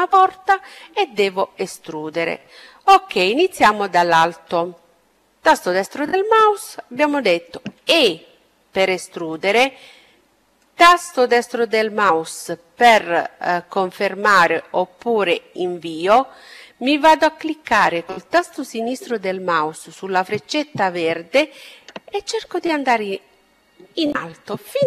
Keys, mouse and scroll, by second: 2.7-4.4 right drag, 3.6-5.6 middle drag, 6.6 e, 18.9-20.6 drag.